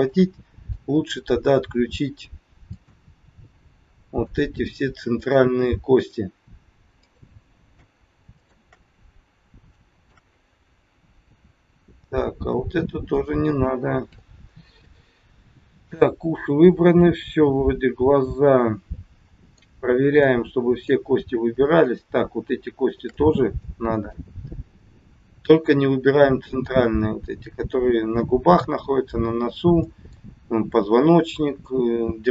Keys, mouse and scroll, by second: 0.1 middle click, 0.9-1.3 scroll down 2, 2.6 shift+click, 4.2 shift+click, 5.9 shift+click, 7.1 shift+click, 8.3 shift+click, 9.3 scroll down 2, 9.7 shift+middle click, 10.2-10.5 scroll up 3, 10.8-11.2 scroll down 2, 13.0 shift+click, 14.7 scroll up 2, 15.3 middle click, 19.7-20.2 scroll up 2, 20.2 middle click, 21.8 shift+click, 22.8 shift+click, 23.6 scroll up 1, 23.7 middle click, 26.8 scroll down 3, 29.8 middle click.